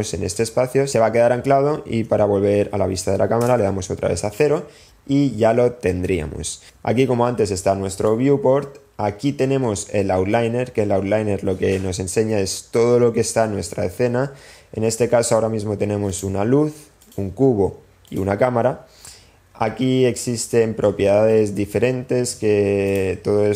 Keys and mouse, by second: 3.5 KP_0, 6.8-8.1 middle drag, 12.4 click, 16.1 click, 17.7 click.